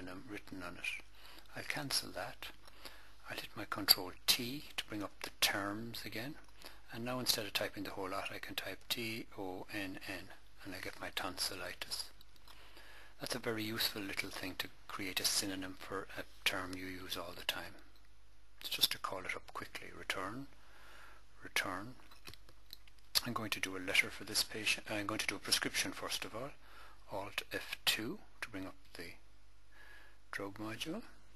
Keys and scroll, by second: 4.9 ctrl+t, 8.3-9.9 typing, 17.4 Return, 21.4 Return, 27.4 alt+F2.